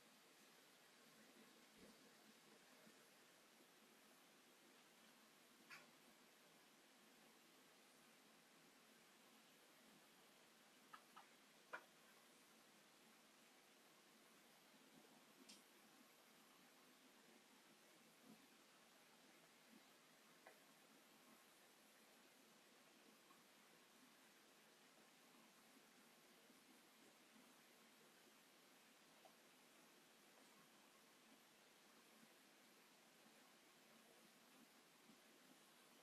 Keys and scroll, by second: 0.3 m, 1.5 d, 1.9 d, 3.0 s, 4.5 m, 6.4 s, 9.3 m, 10.2 space, 16.5 space, 20.5 m, 21.2 space, 22.7 shift+x, 28.8 alt+t, 30.0 space, 31.9 space.